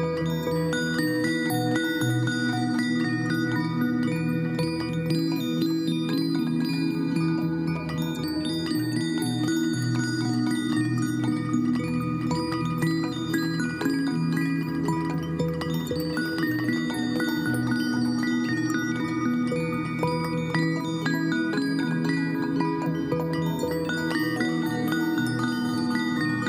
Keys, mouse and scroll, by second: 14.6 ctrl+t, 25.5 ctrl+j.